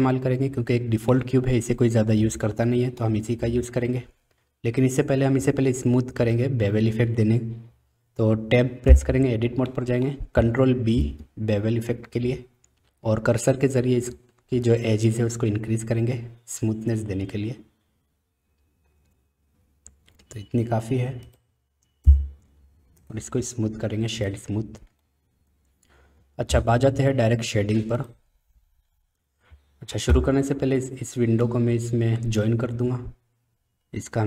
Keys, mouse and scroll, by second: 1.2-3.0 middle drag, 8.9 Tab, 9.7 middle click, 10.9 ctrl+b, 22.0 Tab, 23.1-24.3 right drag, 25.1-26.2 middle drag.